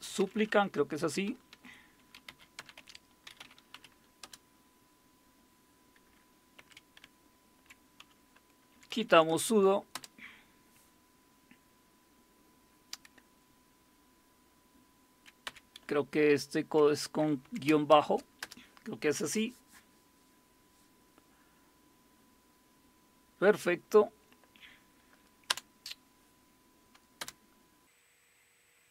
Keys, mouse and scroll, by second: 0.0-4.2 typing, 6.6 Up, 6.8-9.4 typing, 9.9 Return, 15.4 Up, 15.8 Left, 16.3-16.7 Left, 17.4 Delete, 17.9 shift+-, 18.4 Return, 25.5 Return, 27.2 Return.